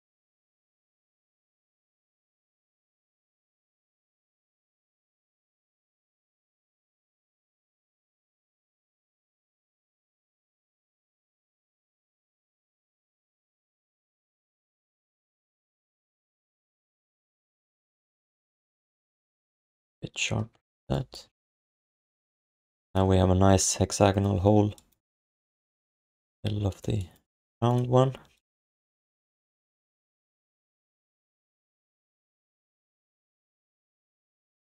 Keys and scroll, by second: 13.0 q, 13.6 alt+shift+d, 14.5 3, 15.8 1, 19.8 q, 20.5 3, 21.2 q, 21.8 alt+shift+d, 28.0 1, 30.6 r, 33.4 q, 33.8 3.